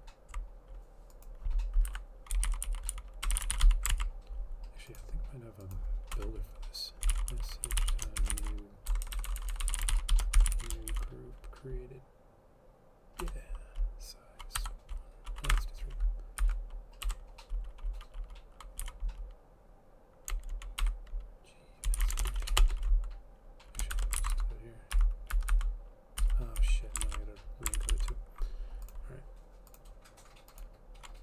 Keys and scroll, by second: 2.0 Left, 2.2-4.3 typing, 6.2 Return, 6.9-11.6 typing, 13.3 Return, 14.7 1, 15.6 BackSpace, 15.6 3, 16.5 Right, 17.1 Home, 18.1-19.4 typing, 20.9-23.1 typing, 24.1 shift+End, 24.3 ctrl+x, 24.3 ctrl+c, 25.5 Up, 25.5 Right, 25.6 Right, 26.3 Down, 26.7 Down, 27.2 ctrl+v, 27.9 ctrl+z, 28.0 ctrl+z.